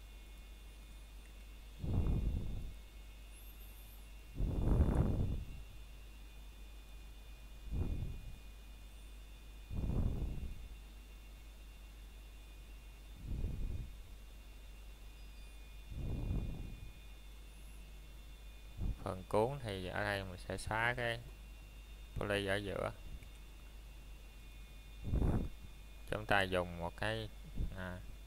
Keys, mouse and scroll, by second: 0.8 scroll down 1, 1.2 middle click, 1.8 shift+middle click, 2.2-2.6 scroll up 1, 3.8 middle click, 4.2 scroll up 1, 7.7 s, 10.2 click, 10.3 click, 10.5 middle click, 11.9 scroll down 1, 12.2 middle click, 12.7-13.1 shift+scroll up 1, 13.1 shift+middle click, 13.4 scroll up 1, 14.9 middle click, 18.5 scroll up 1, 19.0 middle click, 20.7 click, 21.7 Tab, 23.3 click, 23.8 middle click, 24.0 scroll down 1, 24.5 middle click, 25.2 scroll up 1, 25.4 shift+middle click, 25.7 scroll up 1, 27.9 middle click.